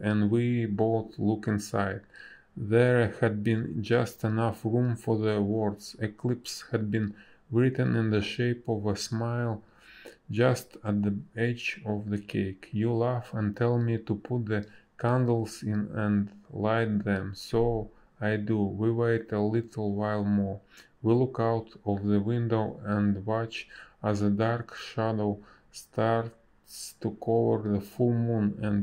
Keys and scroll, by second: 4.0 space, 6.1 a, 13.8 space, 14.9 space, 25.4 n, 26.3 b, 27.3 space.